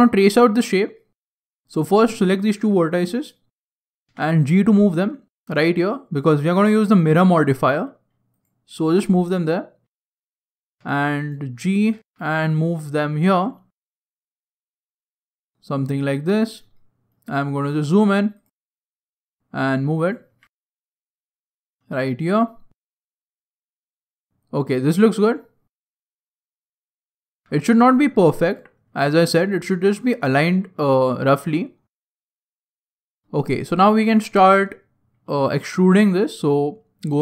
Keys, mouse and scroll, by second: 0.4-0.8 scroll down 3, 0.5-0.8 scroll up 1, 0.8 scroll down 2, 0.8 shift+middle click, 1.6 right click, 2.3 shift+right click, 3.9 g, 7.4 shift+middle click, 7.8 shift+middle click, 8.2 right click, 11.1 shift+right click, 11.8 g, 15.1 scroll up 7, 15.4 shift+middle click, 16.5 scroll down 2, 16.5 scroll up 1, 16.7 shift+middle click, 18.3 right click, 18.7 g, 19.9 right click, 20.2 g, 21.4 scroll down 2, 21.5 scroll down 6, 21.6 scroll up 3, 21.9-23.3 scroll down 3, 22.1-23.3 scroll up 2, 23.5 scroll down 1, 24.9 scroll down 1, 25.8 shift+middle click, 25.8 shift+scroll down 1, 26.7 shift+middle click, 28.4 right click, 28.7 g, 30.5 scroll down 5, 30.6 scroll up 1, 30.7 scroll down 2, 31.1 shift+middle click, 31.1 shift+scroll down 1, 31.6 scroll down 2, 31.7 scroll down 1, 32.0 shift+middle click, 32.5 scroll down 1, 32.8 shift+middle click, 33.6 right click, 35.4 shift+right click.